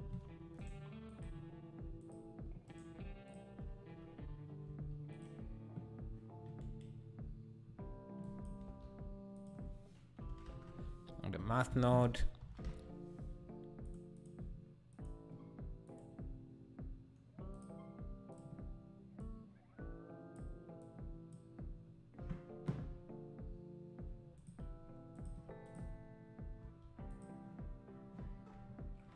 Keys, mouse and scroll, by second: 2.1-4.7 right drag, 4.7 s, 8.2 click, 8.6 shift+a, 15.0-22.6 drag, 22.6 s, 28.4 scroll, 28.4 scroll down 2.